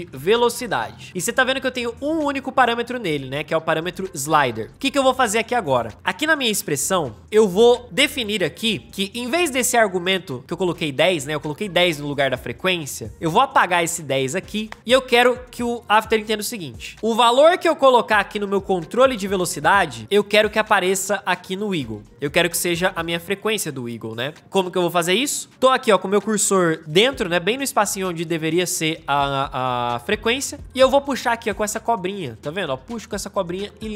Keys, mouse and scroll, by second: 0.0-1.5 typing, 14.1 Return.